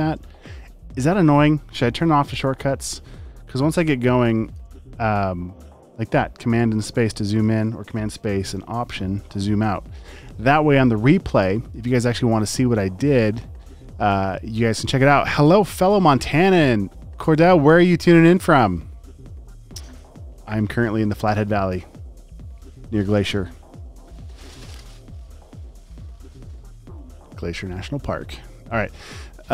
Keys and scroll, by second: 2.3 space, 2.8 space, 3.6 space, 4.1 super+space, 6.4 space, 6.9 super+space, 7.9 space, 8.4 alt+super+space.